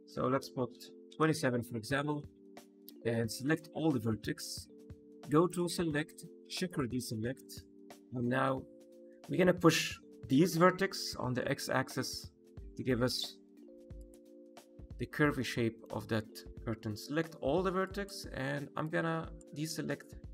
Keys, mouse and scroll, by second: 2.1 middle click, 2.7 1, 3.3 a, 5.4 click, 7.5 middle click, 11.0 g, 11.3 x, 13.9 click, 14.4 middle click, 15.3 middle click, 16.9 a, 17.8 ctrl+click, 18.8 ctrl+click.